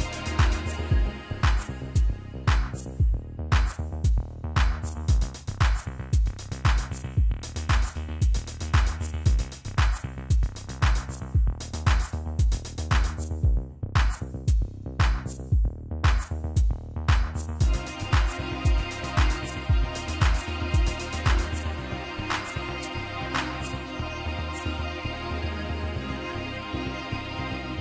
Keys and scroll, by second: 0.1 Down, 0.6 Down, 0.7 Down, 0.9 Down, 1.1 Down, 1.7 Down, 26.8 Up, 26.9 Up, 27.0 Up, 27.5 Up, 27.7 Up.